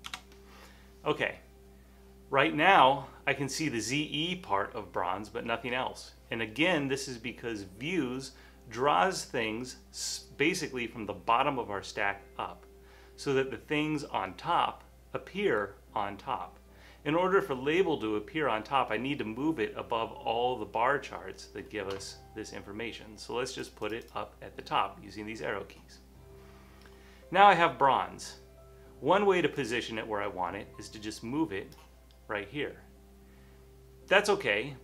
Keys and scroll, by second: 0.1 Return, 1.8-2.5 typing.